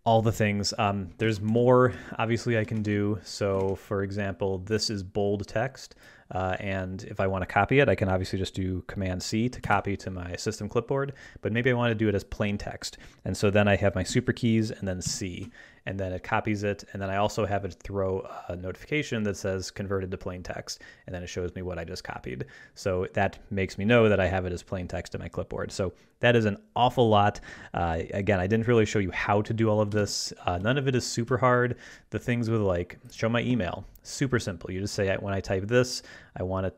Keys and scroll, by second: 1.3 ctrl+shift+Tab, 3.6 ctrl+Tab, 9.6 super+c, 15.1 ctrl+alt+super+c, 30.0 ctrl+Left.